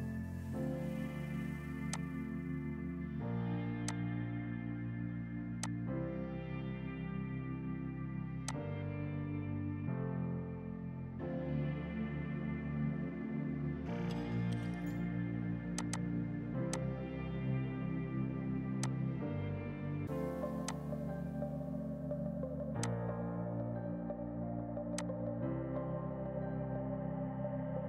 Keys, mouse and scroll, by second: 1.0 ctrl+u, 1.4 Escape, 2.0 click, 4.8 right click, 5.7 click, 6.4 F4, 8.3 F2, 8.5 click, 8.8 right click, 10.9 ctrl+i, 13.0 scroll down 1, 15.8 click, 20.6 F2, 20.7 click, 20.9 right click, 22.9 click.